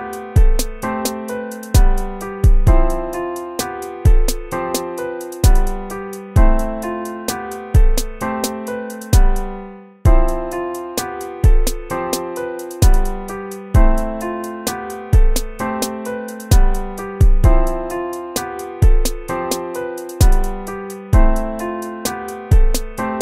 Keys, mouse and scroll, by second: 0.0-7.4 typing, 1.0 ctrl+z, 8.7-10.7 typing, 11.2 ctrl+-, 11.6 ctrl++, 11.8-13.6 typing, 14.0 ctrl+-, 15.0 ctrl++, 15.7-17.0 typing, 18.4 BackSpace, 18.6 ctrl+-, 19.1 ctrl++, 19.5 ctrl++, 20.1 BackSpace.